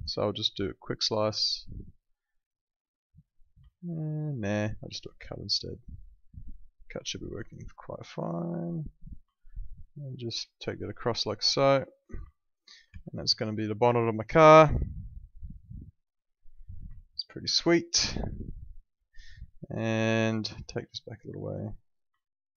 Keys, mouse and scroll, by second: 3.3 right click, 3.7 alt+middle click, 4.9 click, 9.0 right click, 9.3 alt+middle click, 10.9 click, 12.0 right click, 12.9 w, 13.3 alt+middle click, 13.7 click, 16.9 alt+middle click, 20.0 click, 20.6 alt+middle click, 21.2 click, 22.2 alt+middle click.